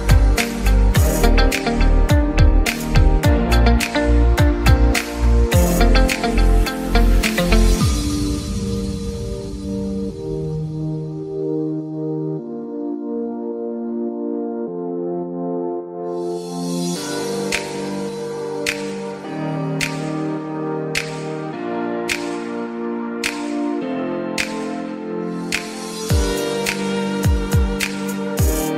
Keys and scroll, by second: 15.8 Escape, 22.1 Escape, 23.7 Escape.